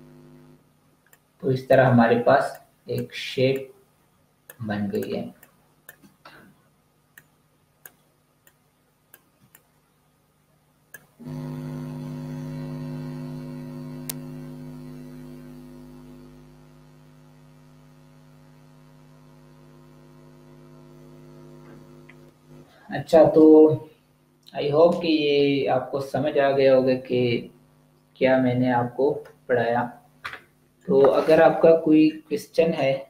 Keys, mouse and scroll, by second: 0.8 space, 1.0 click, 1.2 space, 2.4 click, 4.8 click, 5.0 space, 5.4 click, 5.6 space, 7.0 click, 9.2 space, 9.4 click, 9.8 space.